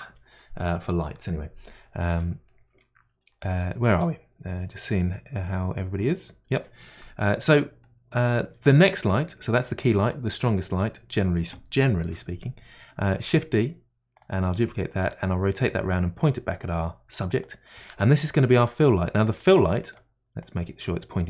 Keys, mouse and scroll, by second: 7.2-8.5 middle drag, 8.5 scroll down 3, 8.9-11.9 middle drag, 13.1 shift+d, 15.0 r, 18.4-20.4 middle drag, 20.4-21.2 drag.